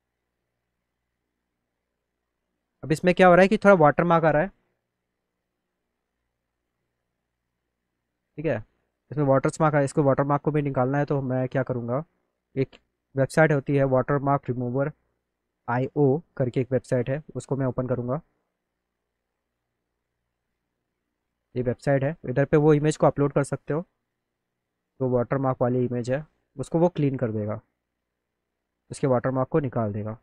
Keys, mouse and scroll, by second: 2.7 click, 3.3 click, 5.1 click, 5.3 click, 8.2 click, 10.9 click, 14.9 click, 22.7 click, 25.0 middle click, 25.2 middle click, 25.5 middle click, 26.5 click, 27.4 click, 27.6 click.